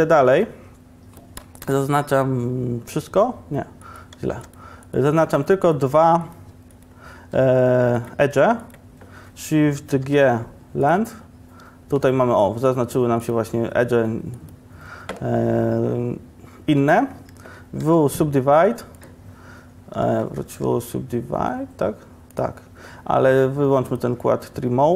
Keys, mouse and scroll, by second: 1.7 ctrl+KP_Add, 4.4 2, 10.1 shift+g, 17.9 w, 20.1 ctrl+z, 20.6 w.